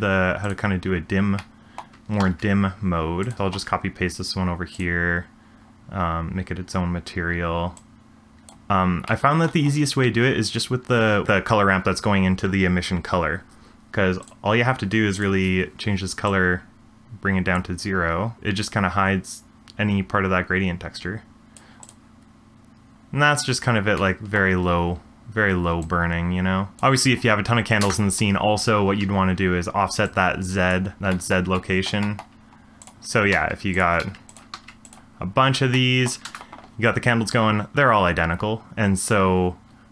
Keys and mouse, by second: 0.4 click, 1.5 middle click, 2.2 shift+d, 3.3 shift+middle click, 4.7 click, 7.9 click, 9.0-10.4 middle drag, 14.2 click, 15.1 click, 21.8 click, 22.9 space, 24.1 middle click, 25.8 click, 27.8 space, 30.0 click, 31.1-31.5 shift+middle drag, 31.7 middle click, 32.1 shift+middle drag, 33.3 shift+d, 34.0 shift+d, 34.7 shift+d, 35.8 shift+middle drag, 36.4 space.